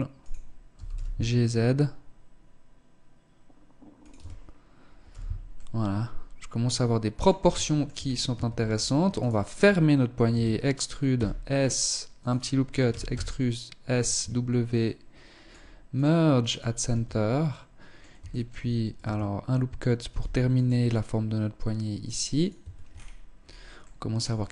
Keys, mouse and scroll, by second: 0.0 g, 3.5 Tab, 4.4 z, 4.8 middle click, 7.0 shift+middle click, 7.4 scroll up 4, 7.6 Tab, 8.5 alt+right click, 9.6 e, 12.2 e, 13.5 w, 16.2 Tab, 16.8 middle click, 17.6 shift+middle click, 18.4 Tab, 19.4 ctrl+r, 21.8 click, 21.9 Tab, 22.2-23.0 scroll down 9, 23.1 middle click, 24.1 KP_1.